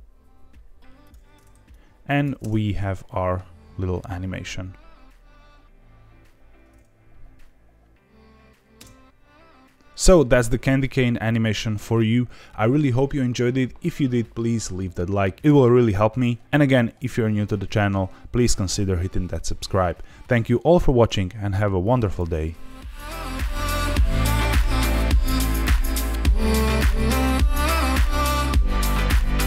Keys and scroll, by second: 2.3 space, 8.7 space.